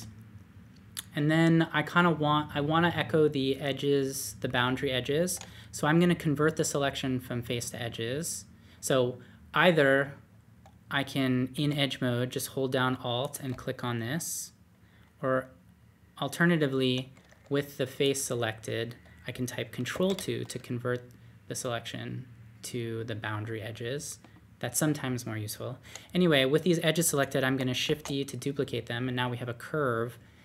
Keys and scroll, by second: 11.5 2, 17.4 3, 19.9 ctrl+2, 27.8 shift+d.